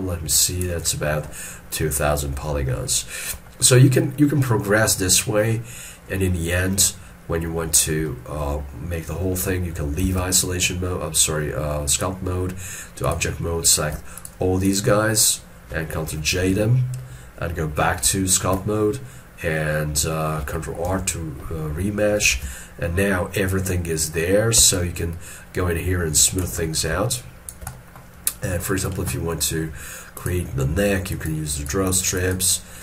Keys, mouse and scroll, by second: 3.7-6.7 scroll up 1, 7.3-8.1 scroll up 1, 8.1 shift+middle click, 10.1 ctrl+Tab, 14.3 shift+click, 14.7 shift+click, 16.5 ctrl+j, 18.1 ctrl+Tab, 18.6 ctrl+Tab, 21.0 ctrl+r, 22.4 alt+e, 22.9 middle click, 23.4 scroll up 1, 24.8 shift+click, 26.7 middle click, 27.2 shift+click, 27.8 shift+middle click, 31.6 double click.